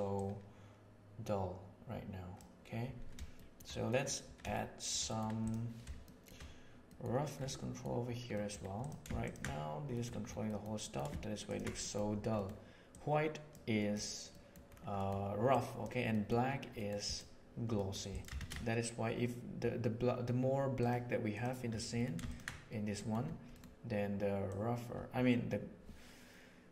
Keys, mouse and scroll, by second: 0.1-2.3 drag, 3.3 shift+middle drag, 3.8 middle click, 4.4-4.8 shift+middle drag, 5.0 middle click, 5.4 click, 6.0 shift+middle drag, 6.8 middle click, 7.4 middle click, 8.2 middle click, 9.2 ctrl+shift+drag, 9.9 middle click, 10.5 middle drag, 10.7 middle click, 11.4 ctrl+shift+drag, 11.7 middle click, 12.3 middle click, 12.8 click, 13.8 middle click, 14.4 middle click, 15.5 click, 16.1 middle click, 16.7 middle click, 17.0 click, 17.6 click, 18.3 shift+a, 21.9 middle drag, 22.2 ctrl+shift+click, 24.4-26.7 drag.